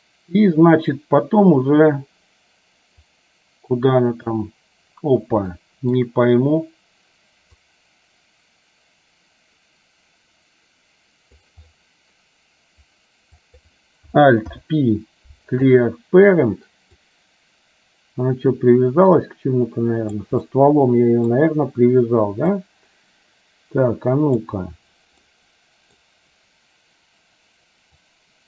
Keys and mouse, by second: 3.2-4.5 drag, 5.7 shift+middle click, 7.8-11.6 drag, 13.5 click, 14.5 alt+p, 17.1-20.3 drag, 20.6 middle click, 22.7-24.6 drag, 25.5 middle click, 28.1-28.4 drag.